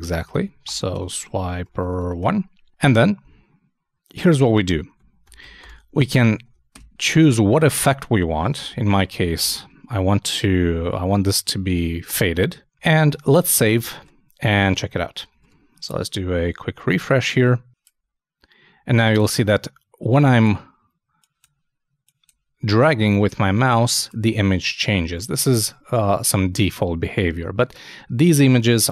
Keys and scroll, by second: 6.2 shift+t, 6.4 shift+;, 6.7 shift+space, 8.7 shift+', 9.0 shift+f, 13.2 super+s, 14.0 super+Tab, 15.4 super+r.